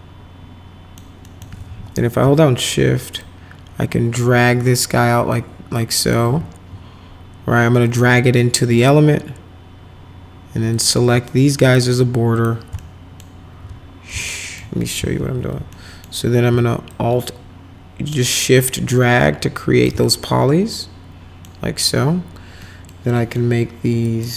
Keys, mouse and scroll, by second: 1.3 alt+middle click, 1.7 w, 3.2-6.2 shift+drag, 7.9 click, 8.8 click, 10.8 click, 11.6 ctrl+click, 12.4 ctrl+click, 12.8 alt+right click, 13.0 alt+middle click, 14.2 alt+middle click, 15.2 alt+x, 15.7 alt+right click, 16.9-19.9 shift+drag, 20.0 alt+right click, 20.9 alt+middle click, 22.6 middle click, 23.2 middle click, 24.1 click.